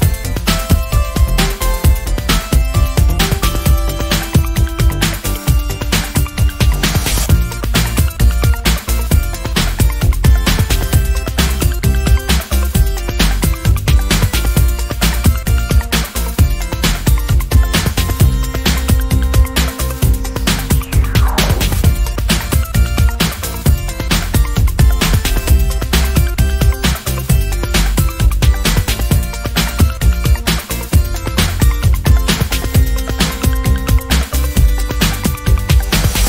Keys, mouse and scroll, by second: 0.8-2.4 ctrl+shift+drag, 2.7 ctrl+click, 4.1 ctrl+shift+click, 4.6 ctrl+shift+click, 6.1 ctrl+shift+KP_5, 7.5-7.8 ctrl+shift+scroll up 2, 8.1 ctrl+click, 8.8 ctrl+click, 10.7-12.3 ctrl+shift+drag, 12.6 ctrl+shift+click, 13.2-16.9 ctrl+shift+drag, 17.5 ctrl+click, 18.4 ctrl+click, 19.8 ctrl+shift+click, 20.8 ctrl+shift+click, 22.5 shift+click, 23.8 ctrl+shift+z, 24.5 ctrl+shift+click, 25.5 ctrl+shift+z, 26.2 ctrl+shift+click, 27.7 Right, 30.0 ctrl+shift+click, 30.5 ctrl+shift+click, 31.5 Right, 34.3 shift+click.